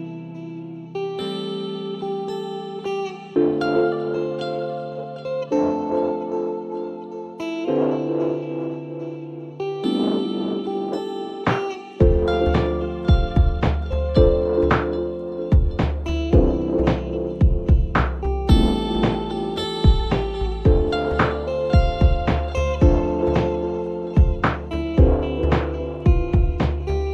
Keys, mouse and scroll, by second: 0.6-2.7 drag, 2.7 scroll down 1, 3.0 scroll up 1, 3.1-5.1 middle drag, 5.1-7.6 drag, 7.6-10.6 middle drag, 10.9 Tab, 11.3 Tab, 11.7-12.1 scroll down 4, 12.8 scroll up 1, 12.9-15.7 middle drag, 15.7-16.7 drag, 16.7 ctrl+z, 18.2-20.1 drag, 20.2 s, 21.4-23.0 drag, 23.0-23.4 scroll up 1, 23.4-24.1 middle drag, 24.1 scroll up 1, 24.2-25.9 middle drag, 25.9-27.1 drag.